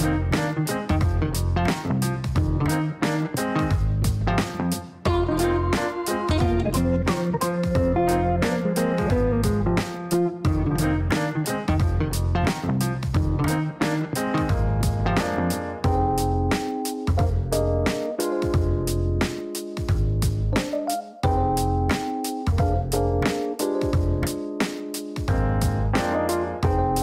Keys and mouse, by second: 0.2 click, 1.7 click, 4.7 click, 10.9 click, 14.2 click, 18.1 click, 19.9-22.5 typing, 23.8 click.